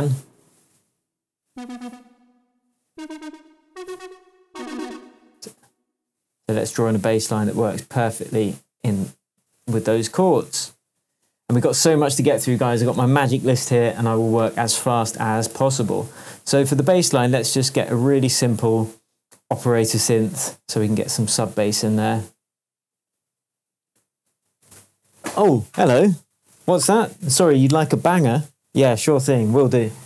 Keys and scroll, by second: 9.7 shift+Tab, 15.8 shift+Tab.